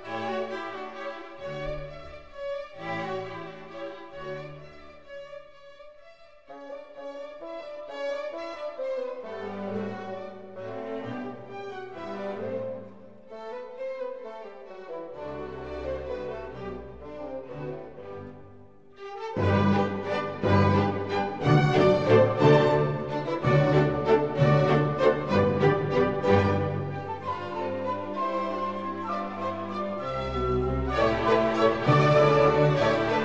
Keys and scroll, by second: 23.7 g.